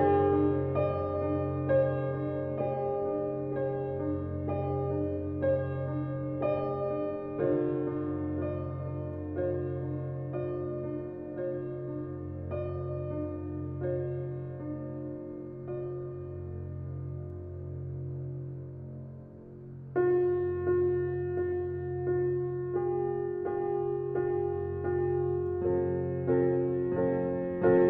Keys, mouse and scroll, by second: 0.5 shift+d, 4.3 g, 7.9 drag, 8.8 shift+d, 12.6 g, 19.9 click, 20.4-21.4 middle drag, 21.4 shift+d, 26.5 click.